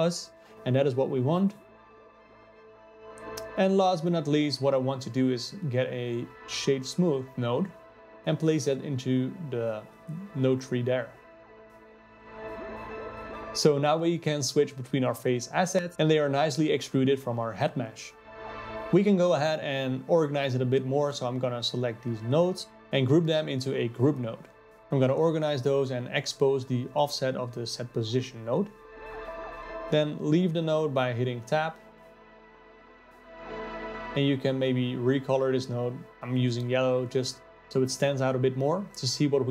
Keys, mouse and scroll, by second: 3.1 shift+a, 13.2-13.6 scroll up 3, 13.6 middle click, 14.5-15.0 scroll down 5, 15.0-16.7 middle drag, 16.7-19.2 drag, 19.6-20.6 drag, 21.8 ctrl+g, 23.0-24.5 drag, 25.0-28.4 drag, 28.7-30.3 drag, 30.3 n, 32.2-33.5 drag, 33.9 ctrl+v.